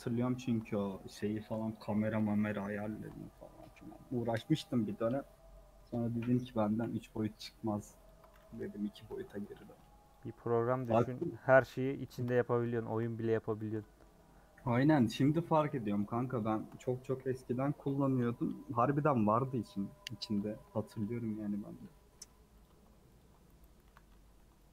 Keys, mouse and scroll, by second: 0.4 alt+shift+click, 0.6-1.6 middle drag, 1.6-2.1 scroll up 2, 2.9 alt+shift+click, 3.5 a, 4.2 u, 4.4-6.0 scroll down 6, 4.7 middle click, 5.6 middle click, 6.3 3, 7.0 click, 8.1 ctrl+click, 9.1 ;, 10.1 click, 10.8 click, 11.0-12.1 middle drag, 12.1 shift+click, 12.3-13.6 middle drag, 13.6 shift+click, 13.8 middle click, 14.2-14.9 scroll up 4, 17.0 a, 18.0 u, 18.5 scroll down 2, 18.7 middle click, 19.2 scroll down 1, 19.4 scroll up 2, 19.8 middle click, 20.6-21.4 scroll up 6, 20.8 middle click, 21.5 middle click, 21.9 scroll up 2, 22.6 click, 23.2 ctrl+click, 23.8 a.